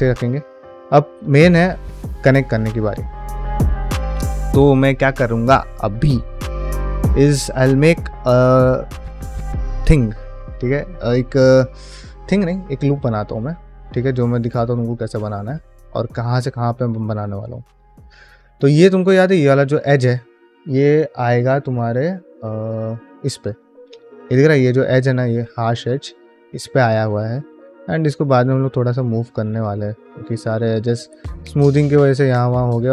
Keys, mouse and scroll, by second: 0.1 ctrl+middle drag, 0.6 click, 0.9 shift+middle drag, 1.3 drag, 1.6 middle drag, 2.1 Tab, 2.5 middle click, 2.9 shift+middle click, 4.1 shift+middle click, 10.7 middle click, 11.9 middle click, 13.6-15.3 middle drag, 15.9 shift+middle click, 16.3 middle click, 17.1 middle click, 17.7 2, 18.2 alt+click, 18.6 middle click, 19.1 shift+middle click, 19.3 middle click, 21.9 click, 23.6 middle click, 25.9 middle click, 26.2 1, 26.6 ctrl+middle click, 27.2 click, 27.4 g, 28.1 click, 28.3 g, 29.2 click, 29.4 g, 30.1 middle click, 30.8 g, 31.6 click, 31.8 shift+g, 32.6 g.